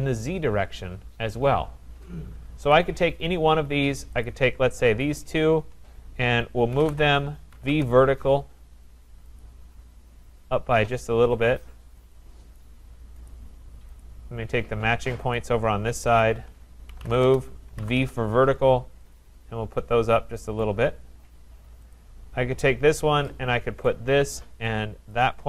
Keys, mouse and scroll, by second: 2.7 click, 4.3 click, 5.2 shift+click, 6.4-7.7 typing, 9.4 click, 12.1 click, 13.3 click, 14.0 click, 15.4 click, 16.2 shift+click, 16.7-18.0 typing, 19.1 click, 20.6 click, 21.9 click, 23.8 click, 25.1 shift+click.